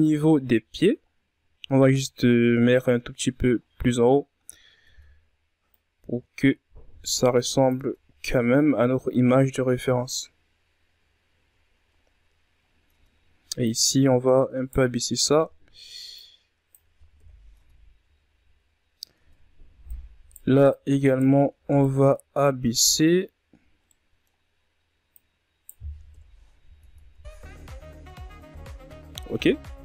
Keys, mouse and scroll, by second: 1.0-2.4 ctrl+scroll up 4, 2.4-3.3 scroll up 11, 3.3-3.7 ctrl+scroll down 4, 3.7 Tab, 4.7 click, 6.7 Tab, 7.0-8.5 scroll down 13, 8.9 scroll down 1, 10.5-11.8 ctrl+scroll up 12, 11.8 Tab, 12.6 Right, 13.8-15.1 middle drag, 15.1-16.1 drag, 16.1 KP_1, 16.5 Tab, 17.2-17.6 scroll down 3, 17.6-18.0 scroll up 7, 18.0 Tab, 18.8 right click, 19.6 right click, 20.4 ctrl+z, 20.7 right click, 22.8-24.0 middle drag, 24.0 right click, 25.0 KP_1, 25.7 Tab, 26.3-27.2 scroll down 4, 27.2-28.3 scroll down 10, 29.5-29.8 scroll down 2.